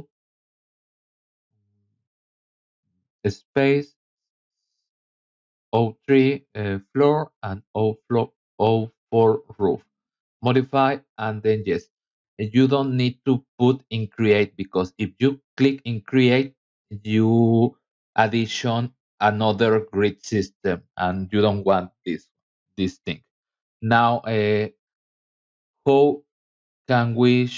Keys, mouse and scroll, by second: 1.0 KP_3, 1.3 KP_Subtract, 2.1 shift+d, 2.9 t, 4.8 KP_Subtract, 5.6 shift+r, 6.7 f, 8.9 click, 10.4 click, 16.0 click, 16.7 scroll down 1, 17.0 middle click, 17.4-17.9 scroll down 2, 18.1 middle click, 18.7 scroll down 1, 19.5 middle click, 22.8 scroll down 1, 23.3 middle click.